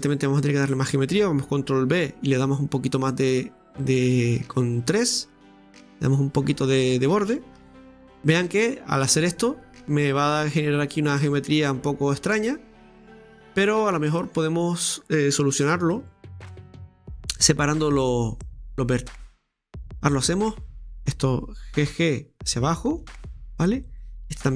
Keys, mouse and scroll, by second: 0.0 alt+shift+right click, 0.2 alt+shift+right click, 1.9 ctrl+b, 6.7-7.6 scroll down 2, 7.6 Tab, 8.0 middle click, 8.6-9.0 scroll down 2, 9.0-13.3 middle drag, 13.3-13.7 scroll up 3, 13.7 middle click, 14.2-15.9 scroll up 2, 16.0 Tab, 16.6-17.4 scroll up 1, 17.4-20.6 middle drag, 17.4-19.5 scroll up 1, 19.5 scroll up 1, 19.6-20.7 drag, 20.6 right click, 21.9 g, 24.0 right click, 24.3 g.